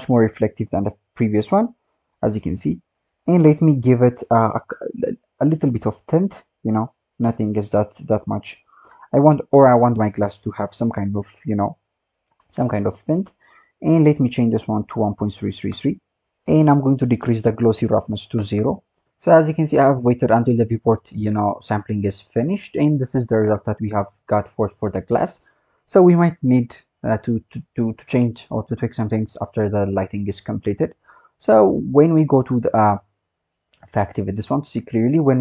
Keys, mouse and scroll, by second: 0.3-1.4 scroll down 12, 2.9-4.2 scroll up 24, 4.2 click, 12.9 click, 13.4-13.9 scroll down 6, 13.9-15.1 drag, 15.1 KP_3, 15.2 KP_3, 15.4 KP_3, 16.2-16.6 scroll up 6, 16.6 click, 24.3 click, 25.7-28.4 scroll down 1, 28.4-31.8 scroll up 6, 32.4 click, 33.7 click, 34.9 click.